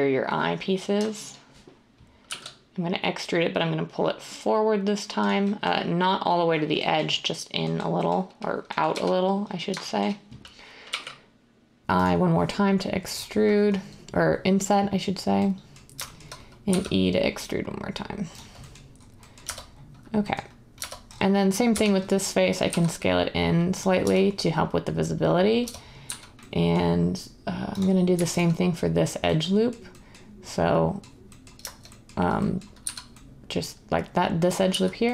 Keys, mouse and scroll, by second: 2.2 e, 8.9 1, 10.8 i, 16.6 e, 19.4 Tab, 20.8 Tab, 21.7-22.6 typing, 24.0 Tab, 25.6 Tab, 25.8-26.5 typing, 32.8 z, 34.7-35.1 typing.